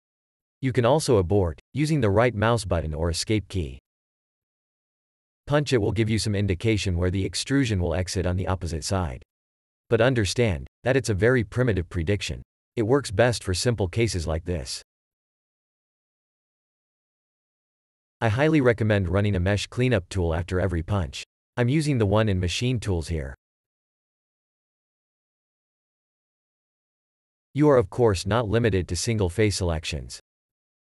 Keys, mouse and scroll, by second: 0.6 Tab, 1.2 ctrl+f, 1.8 Tab, 4.5 click, 6.2 shift+e, 13.2 click, 14.8 click, 19.6 3, 25.5 3, 27.8 click, 28.2 shift+click.